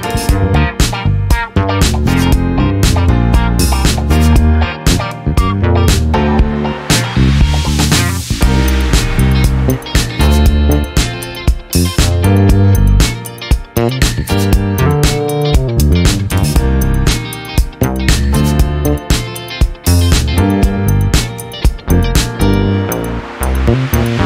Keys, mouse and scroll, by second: 1.4 click, 3.3 click, 4.2 click, 6.1 click, 7.5-8.8 drag, 8.9 ctrl+z, 11.7-13.5 drag, 14.6 click, 15.8 click, 17.0 ctrl+z, 17.5 ctrl+click, 18.2-20.5 drag, 21.0 click, 22.8 click, 23.9 KP_1, 24.0 KP_0.